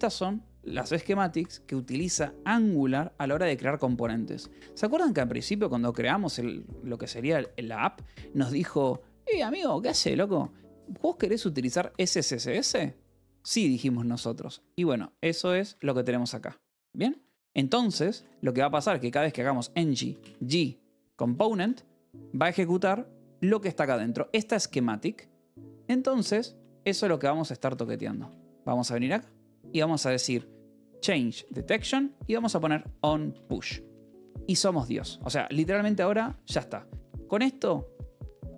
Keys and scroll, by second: 5.3 Escape, 14.0 j, 14.4 e, 15.5 v, 16.2 e, 17.1 Escape, 18.2-22.1 typing, 25.4 Escape, 25.8-31.5 typing, 32.5 Escape, 33.2 Return, 33.7 Escape, 34.3-36.8 typing.